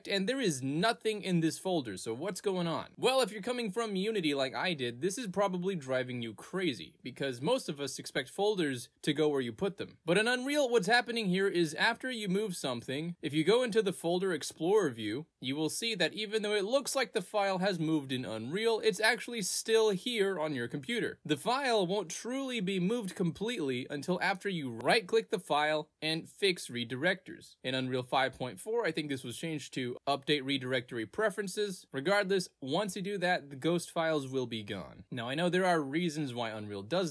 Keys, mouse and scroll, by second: 1.0 click, 1.7 click, 1.9 click, 3.8 click, 5.3 click, 6.0 click, 7.0 click, 8.3 click, 9.0 click, 10.9 click, 11.3 click, 11.9 click, 12.0 right click, 14.1 click, 15.7 click, 16.6 click, 18.7 right click, 20.0 click, 21.1 click, 22.2 click, 22.9 click, 23.3 click, 23.7 right click, 25.8 click, 27.4 click, 27.6 right click, 32.3 click, 33.2 click, 33.3 click, 34.5 click, 35.0 click, 36.3 click.